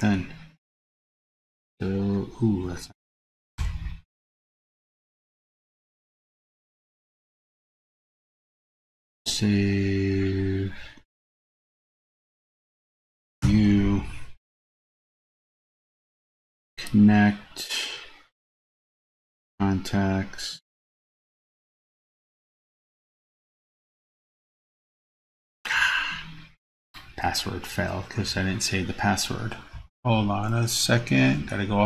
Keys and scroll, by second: 13.6 super+n.